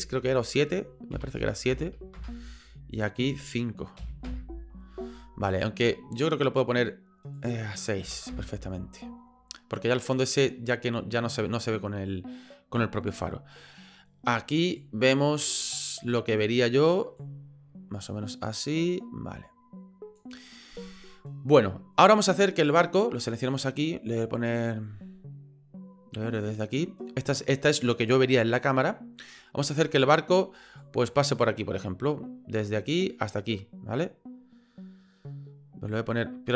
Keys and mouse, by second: 3.4-5.0 drag, 7.4-8.8 drag, 11.9 middle click, 14.8 click, 17.2-20.2 drag, 20.2-22.6 middle drag, 22.6 right click, 30.8-36.5 drag.